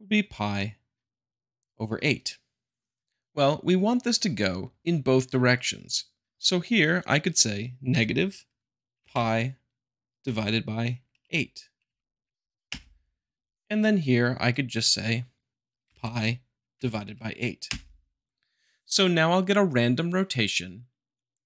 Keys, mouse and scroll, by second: 0.3-1.3 drag, 5.9-6.9 drag, 7.9 -, 9.0 p, 9.1 i, 10.3 /, 12.7 Return, 14.5-15.5 drag, 15.9 p, 15.9 i, 16.7 /, 17.7 Return.